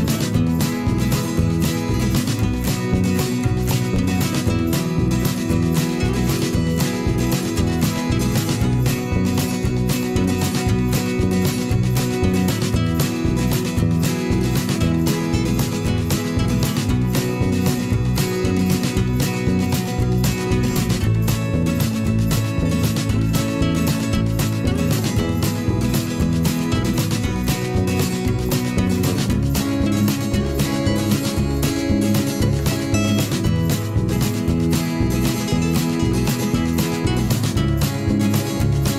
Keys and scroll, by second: 23.0 v.